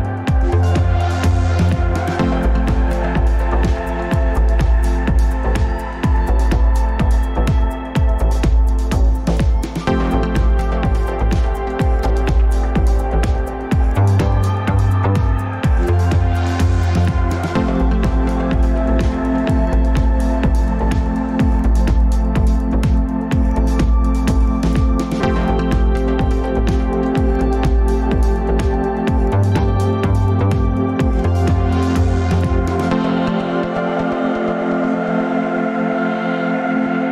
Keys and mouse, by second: 1.5 ctrl+y, 2.0 ctrl+y, 3.1 ctrl+shift+z, 3.8-5.5 ctrl+shift+z, 6.7 click, 7.2 Tab, 7.9 Tab, 9.3 ctrl+s, 10.1-11.0 drag, 12.2 click, 13.9-15.4 drag, 15.9 click, 22.7-24.1 drag, 26.1 click, 36.9 click.